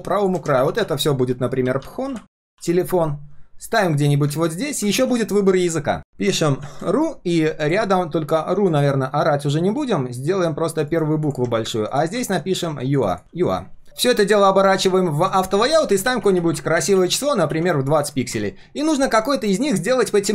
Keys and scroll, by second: 0.5 ctrl+g, 0.8 ctrl+r, 2.5 ctrl+s, 4.9 ctrl+s.